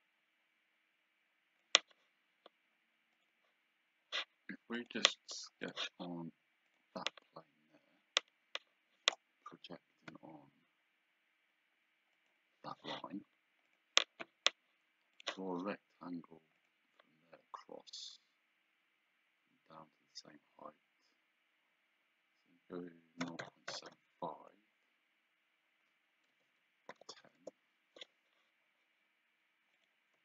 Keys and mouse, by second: 3.2 click, 4.8 click, 10.2 p, 12.2 click, 13.7 click, 15.2 click, 16.6 click, 23.3 KP_0, 23.5 KP_Decimal, 24.0 KP_5, 26.4 Tab, 27.0 KP_1, 27.1 KP_0, 27.5 Return, 29.8 click.